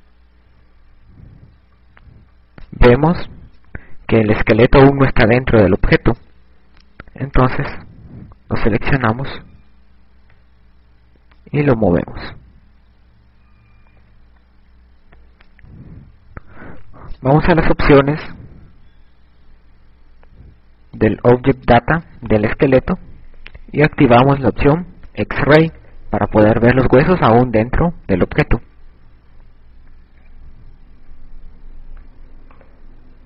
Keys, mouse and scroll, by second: 0.5-3.4 typing, 5.8 a, 11.0 click, 15.2 KP_6, 16.8 KP_6, 17.2 KP_6, 17.4 KP_6, 17.5 KP_6, 22.8 click, 28.0 a.